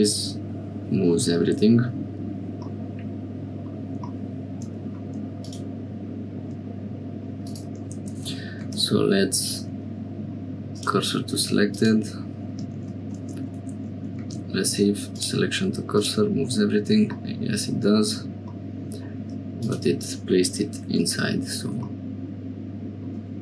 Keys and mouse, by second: 2.7-3.7 middle drag, 5.4 click, 8.5 shift+s, 8.8-11.6 drag, 11.7 click, 12.7 shift+a, 14.1 shift+s, 15.9 click, 17.2 click, 18.5 click, 19.5 click, 21.0 h.